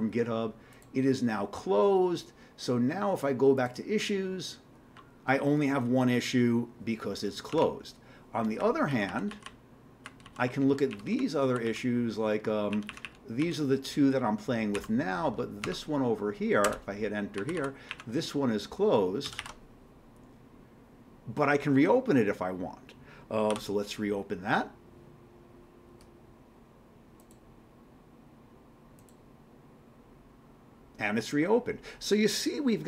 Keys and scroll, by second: 7.6 alt+Tab, 8.6 q, 8.9 Down, 9.1 Down, 9.3 Down, 9.5 Down, 10.0 Down, 10.2 Down, 10.9 Up, 11.1 Up, 11.4 Down, 11.6 Down, 12.7 Up, 12.9 Up, 13.0 Up, 13.4 Down, 14.7 Down, 15.6 Tab, 16.6 Return, 17.4 Down, 17.9 Up, 19.3 ctrl+c, 19.4 ctrl+e, 23.5 y.